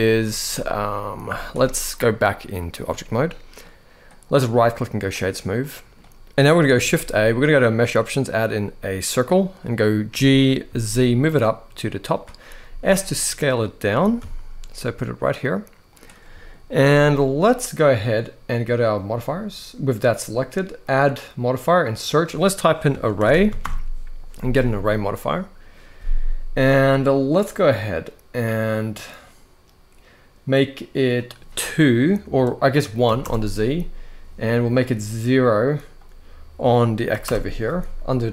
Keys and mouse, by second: 0.2 middle click, 1.0 z, 2.0-2.5 drag, 2.9 middle click, 4.1-4.8 right drag, 5.3 middle click, 6.5 shift+a, 9.8 g, 10.4 z, 12.3 s, 13.6 g, 13.9 z, 15.9-16.2 middle drag, 16.6 s, 17.2 click, 18.7 click, 20.6-24.7 drag, 23.0 r, 31.1-33.0 drag, 35.1-37.0 drag.